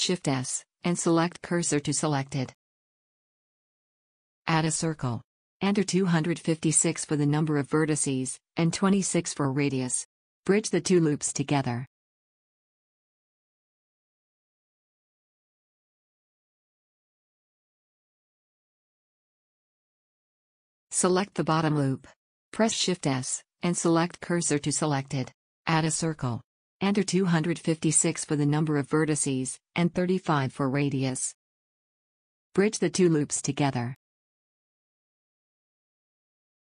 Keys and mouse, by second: 1.1 shift+s, 3.9 shift+a, 5.7-7.2 drag, 15.6 middle click, 16.2-17.7 drag, 17.7 w, 18.2 click, 19.5 a, 19.5 a, 21.7 shift+s, 25.2 shift+a, 34.2 w, 36.3 a.